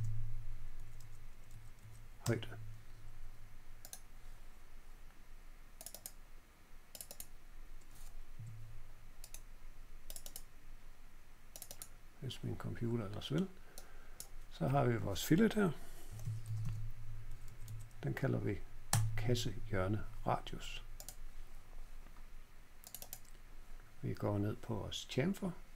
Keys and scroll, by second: 0.0-1.9 typing, 0.7 Page_Down, 0.9 Page_Down, 2.2 Return, 8.3 Escape, 15.8-17.1 typing, 17.2 Down, 17.4 Down, 17.6 Down, 18.9 Return.